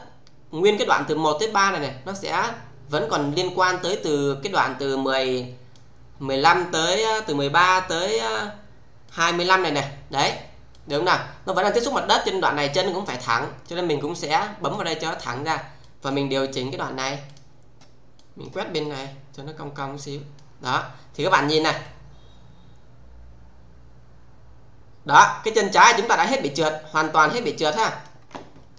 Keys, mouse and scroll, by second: 2.4-5.8 click, 9.0 click, 10.1 click, 14.6 click, 17.2 click, 18.8-20.4 middle click, 20.6 click, 21.8-28.1 click, 28.5 space.